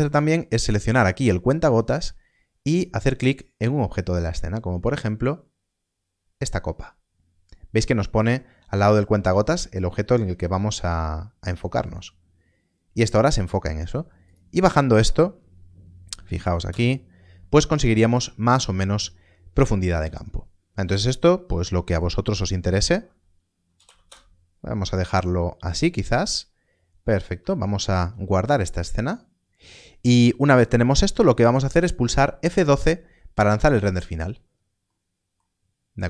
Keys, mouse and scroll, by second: 0.8 click, 11.7 click, 14.2 click, 16.2 BackSpace, 16.3 2, 16.7 Return, 21.9 Return, 23.7 BackSpace, 24.1 Return, 34.0 ctrl+s, 34.8 middle click.